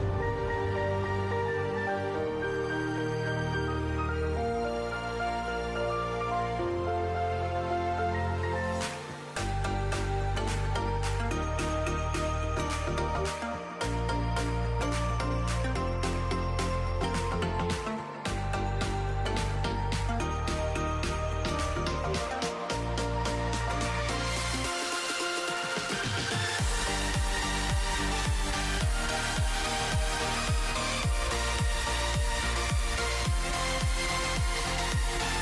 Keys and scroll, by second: 0.0-2.7 typing, 4.2-5.3 typing, 10.8-12.9 typing, 14.7-15.5 typing, 17.3-18.2 typing, 21.5-23.4 typing, 24.5-27.4 typing, 29.5-32.8 typing.